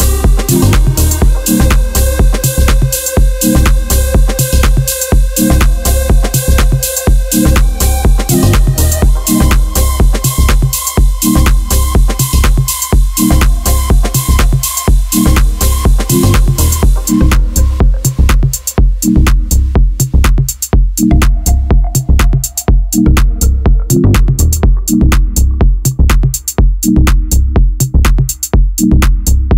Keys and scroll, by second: 0.5 Tab, 3.5 Tab, 3.9 z, 4.5 z, 4.6 z, 5.8 Tab, 5.9 a, 8.3 shift+a, 21.5 ctrl+a, 26.0 b, 27.8 r.